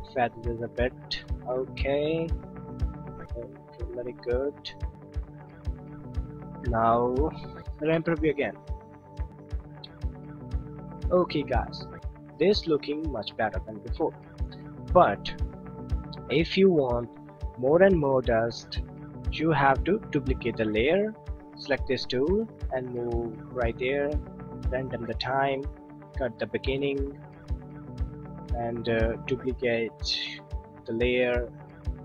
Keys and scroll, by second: 20.5 d, 30.8 d.